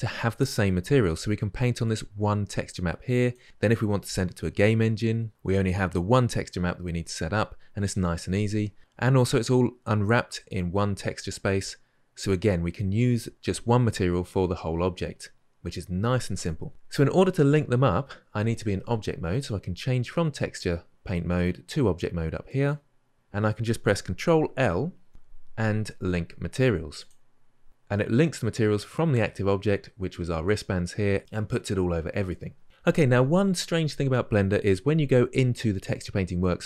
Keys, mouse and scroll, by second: 22.5-26.9 drag, 26.9 ctrl+l.